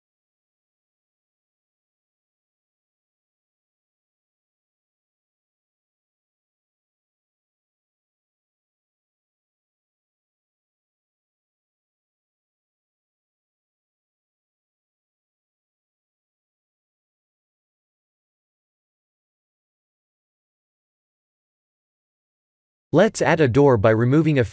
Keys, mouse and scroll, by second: 0.3-1.0 scroll down 3, 1.2-2.0 scroll up 7, 2.5 Tab, 3.0 1, 3.6 shift+z, 4.0 click, 4.3 b, 5.6 g, 10.1 Tab, 10.7-11.9 scroll down 8, 11.9 middle click, 12.5 shift+z, 13.1 middle click, 13.2 middle click, 17.1 click, 17.9 KP_1, 21.1 Tab, 21.7 Tab, 22.5 ctrl+r, 23.1 click, 23.7 Tab.